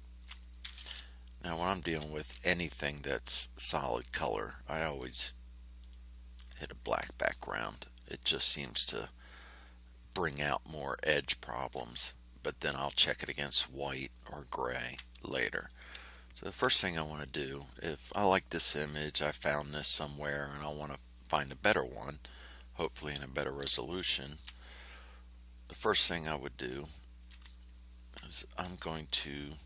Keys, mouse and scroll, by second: 0.4 ctrl+click, 1.8 5, 4.9 click, 5.7 click, 14.3 ctrl+scroll up 2, 15.1 ctrl+click, 16.3 ctrl+scroll down 2, 16.8 ctrl+middle click, 24.3 r, 25.7-27.4 drag, 27.6 ctrl+scroll up 2, 28.7 ctrl+scroll up 2.